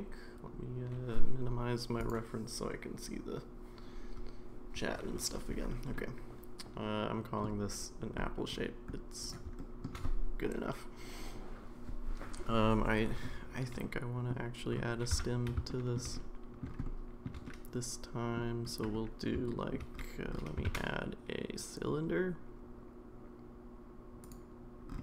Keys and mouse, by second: 6.0-7.4 middle drag, 9.6 shift+middle drag, 13.8-14.3 middle drag, 15.1 Tab, 15.7 shift+middle click, 16.1 middle click, 16.8 shift+middle click, 17.4 middle click, 19.5 shift+middle click, 20.6 shift+a.